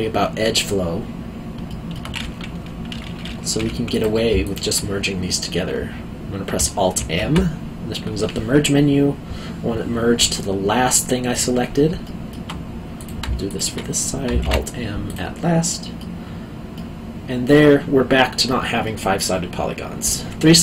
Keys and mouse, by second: 1.7 alt+middle click, 3.5 1, 3.9 click, 4.4 shift+click, 7.0 alt+m, 11.3 click, 12.0 alt+middle click, 13.0 click, 13.4 shift+click, 14.4 alt+m, 15.0 click, 15.7 middle click, 18.8 middle click.